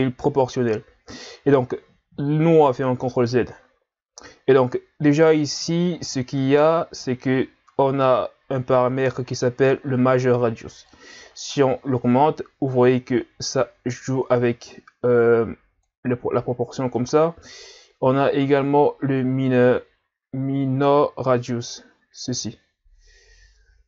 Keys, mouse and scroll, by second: 10.9 click, 17.0 click.